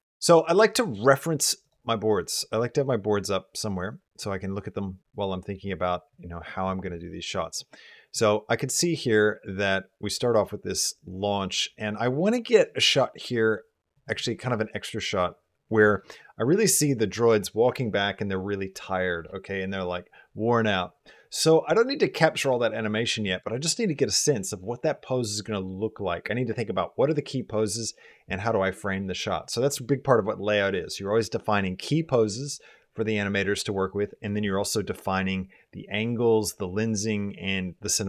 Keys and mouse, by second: 0.7 click, 2.4-4.0 middle drag, 8.0-13.7 drag.